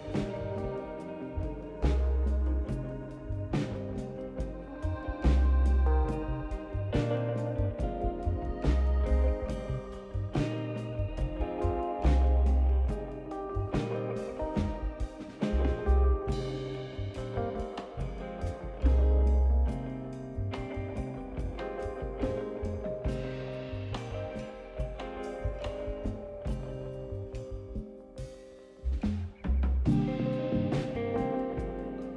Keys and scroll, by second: 3.2-4.7 typing, 7.8-8.7 typing, 10.0 typing, 29.9-32.1 typing.